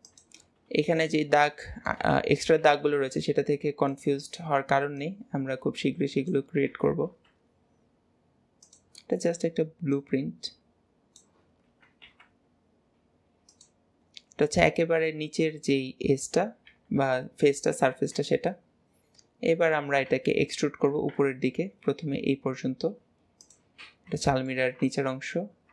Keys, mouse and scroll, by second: 1.7 middle click, 5.0 click, 9.9 click, 16.9 KP_3, 18.4-20.1 shift+middle drag, 20.1 Tab, 23.8 scroll down 2, 24.3-25.7 shift+middle drag.